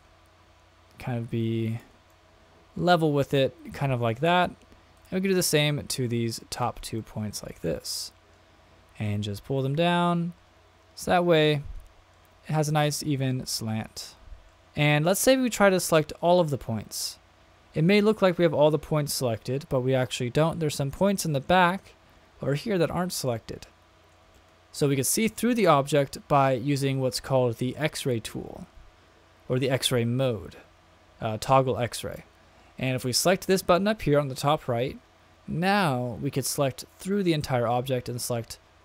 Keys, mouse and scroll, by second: 0.0 click, 2.1-4.1 middle drag, 5.0 click, 5.6 middle click, 6.5 shift+click, 7.0-7.5 middle drag, 8.0 middle click, 9.0 click, 11.4 middle click, 13.3-14.6 middle drag, 15.6-16.9 drag, 20.6-21.7 middle drag, 23.3-24.1 middle drag, 24.3-24.8 shift+middle drag, 24.9 middle click, 27.7 click, 35.8-37.1 drag, 38.1-38.8 middle drag.